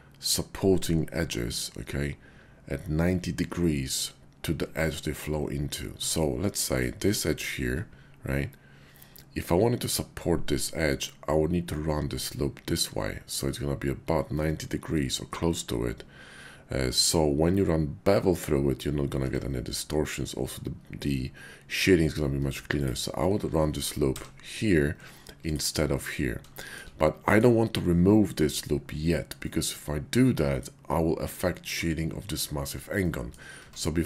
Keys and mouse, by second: 3.6 shift+click, 5.9 Tab, 6.6 click, 19.2 Tab, 19.9 click, 24.1 j, 24.9 Tab, 26.5 shift+click, 27.2 middle click, 29.4-30.7 middle drag, 32.9 click, 33.6 Tab.